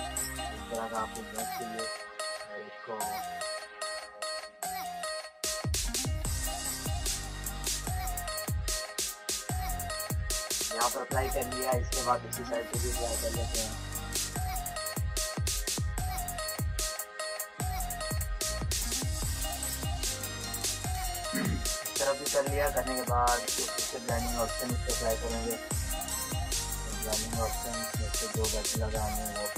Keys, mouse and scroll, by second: 0.0-0.8 typing, 0.9 click, 1.9 ctrl+space, 2.0 ctrl+click, 2.2 [, 3.1 click, 4.1 ], 4.6-8.4 drag, 8.4 z, 8.8-10.4 drag, 10.4 click, 10.9 space, 11.2 click, 11.4 space, 11.6 click, 11.8 space, 12.7-14.4 drag, 14.4-20.9 drag, 23.3 click.